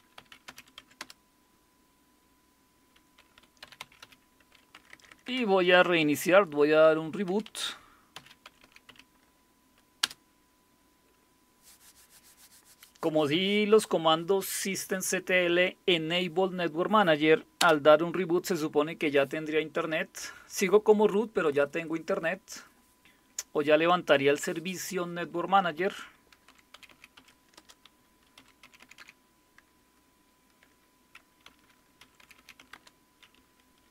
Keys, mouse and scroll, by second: 0.0-1.0 typing, 3.2-5.1 typing, 7.0-9.4 typing, 10.0 Return, 17.6 Return, 26.2-29.0 typing, 30.6-33.9 typing.